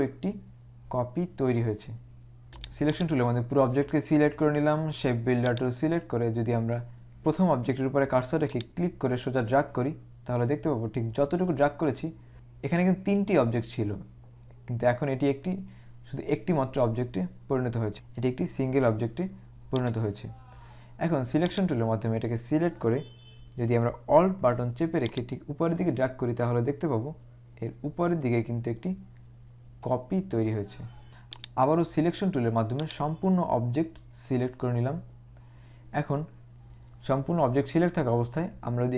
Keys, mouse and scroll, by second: 2.7 click, 5.6 click, 8.6 click, 17.9 click, 19.9 click, 21.6 click, 31.1 click, 32.9 click.